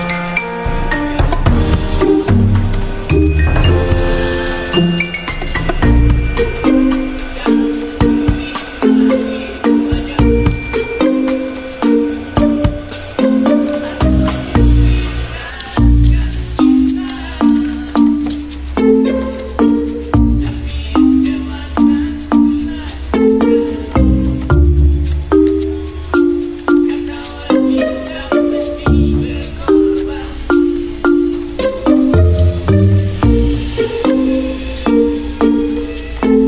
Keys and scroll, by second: 5.1-5.8 typing, 9.0 ctrl+2, 12.2 ctrl+z, 15.6 ctrl+d, 22.3 ctrl+g, 31.6 ctrl+f.